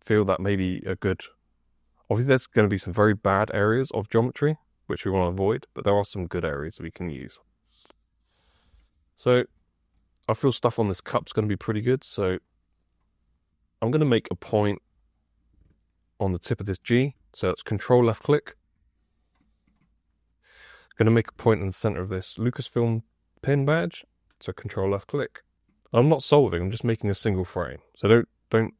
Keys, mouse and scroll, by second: 11.1 F2.